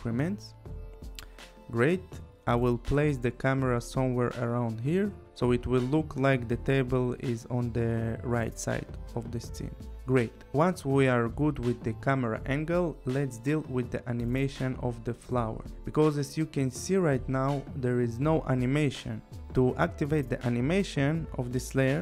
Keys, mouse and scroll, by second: 2.7 click, 9.1 click, 11.0 click, 18.1 click.